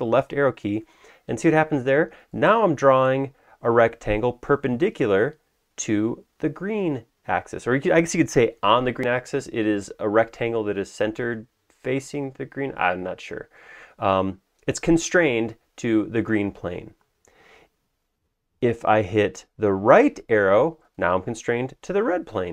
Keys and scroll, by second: 0.2 Left, 18.6 Escape, 19.1 Right.